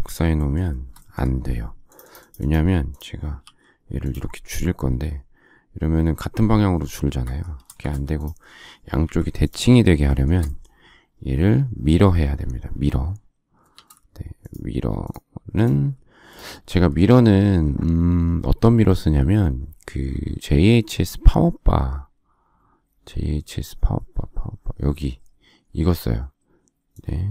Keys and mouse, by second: 0.7 space, 3.3 s, 7.1 Escape, 7.6 space, 7.7 Escape, 8.9 Delete, 16.7 click.